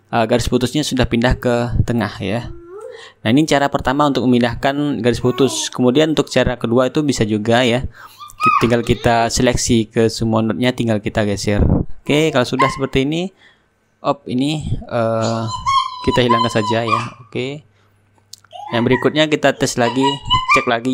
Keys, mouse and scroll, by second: 5.2 right click, 11.5 click, 13.4 click, 15.3 F12, 16.8-17.9 middle drag, 17.9-20.9 drag.